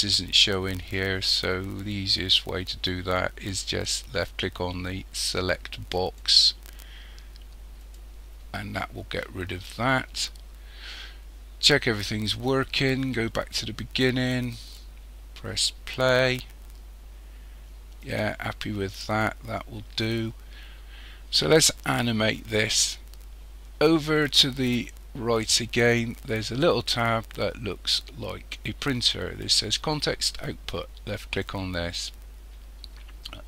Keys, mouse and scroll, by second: 6.0 click, 12.8-17.7 drag, 18.1 click, 31.2 click.